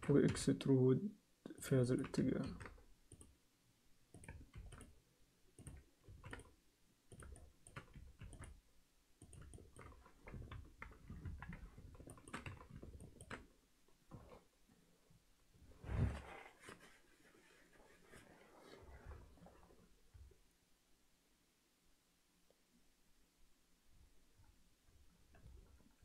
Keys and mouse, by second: 0.3 e, 1.8 alt+middle click, 2.4 ctrl+r, 4.6 ctrl+r, 6.1 ctrl+r, 7.3 alt+shift+middle click, 8.2 ctrl+r, 9.5 alt+shift+middle click, 10.5 ctrl+KP_3, 11.2 ctrl+KP_1, 12.1 alt+shift+middle click, 12.3 z, 13.0 ctrl+alt+click.